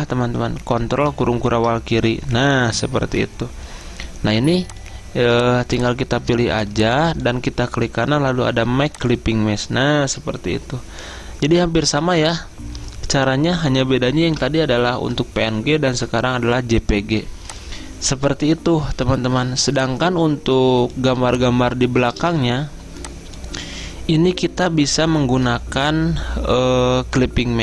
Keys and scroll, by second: 1.2 ctrl+[, 18.6 Escape, 19.5 z, 22.2 v.